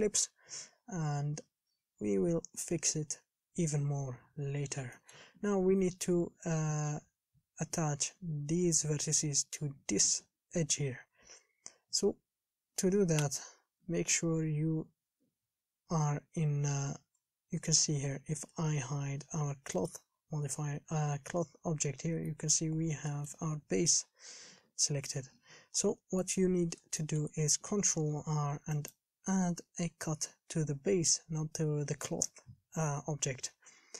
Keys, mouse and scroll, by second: 0.9-2.5 scroll down 8, 2.5 KP_1, 3.1 scroll up 4, 4.7-5.2 scroll up 4, 5.2 shift+middle click, 5.8-11.5 scroll up 4, 11.5-14.0 scroll down 4, 14.0 a, 15.3 l, 18.1 shift+h, 18.9 a, 19.6 scroll down 3, 20.0 shift+middle click, 20.4-22.4 scroll up 3, 22.4 scroll up 1, 22.5 middle click, 22.9-23.3 scroll down 4, 23.3-24.5 shift+middle drag, 24.5 KP_1, 24.8-25.2 scroll up 3, 26.0 alt+h, 26.4 shift+middle click, 26.7 a, 26.9-27.2 scroll up 4, 27.2 shift+middle click, 28.2 ctrl+r.